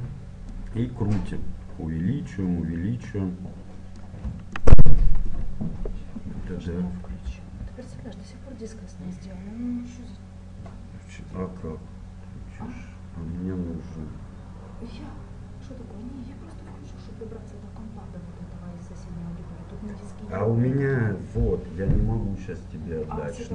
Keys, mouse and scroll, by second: 0.6-2.1 drag, 4.6-6.6 middle drag, 7.2 g.